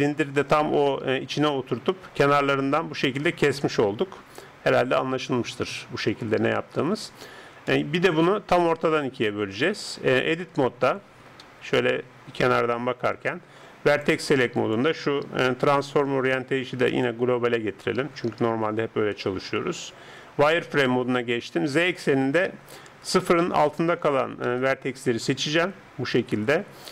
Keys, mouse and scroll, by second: 1.5-5.0 middle drag, 5.7 KP_7, 7.7-10.0 middle drag, 10.0 Tab, 11.4 KP_3, 13.9-17.7 drag, 19.2 z, 24.6 a, 25.5 b.